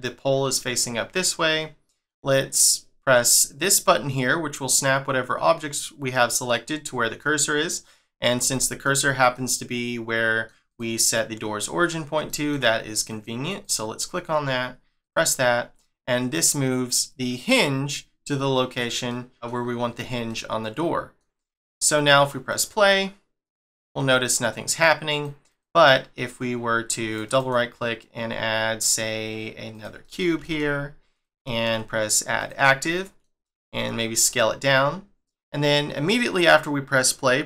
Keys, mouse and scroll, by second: 6.1 middle click, 7.2 middle click, 7.8 scroll up 2, 8.5 shift+middle click, 10.7 click, 11.1 middle click, 11.8 scroll down 1, 12.2 shift+middle click, 13.1 click, 13.6 click, 15.0 click, 15.8 middle click, 17.8 scroll down 1, 19.1 middle click, 19.6 scroll up 2, 20.3 middle click, 22.5 click, 25.1 click, 25.4 click, 25.9 scroll down 1, 27.1 right click, 27.3 right click, 30.0 middle click, 30.3 g, 31.4 shift+middle click, 32.3 click, 32.8 middle click, 33.6 s.